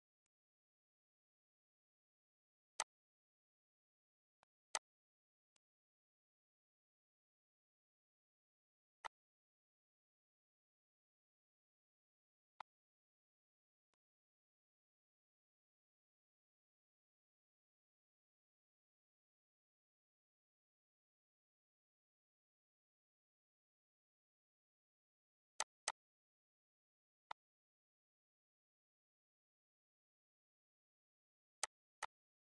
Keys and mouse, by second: 0.2 click, 2.2 click, 2.7 click, 4.4 click, 5.5 click, 9.0 click, 12.5 click, 13.5 z, 13.8 click, 25.5 click, 26.4 ctrl+s, 27.2 click, 31.6 click.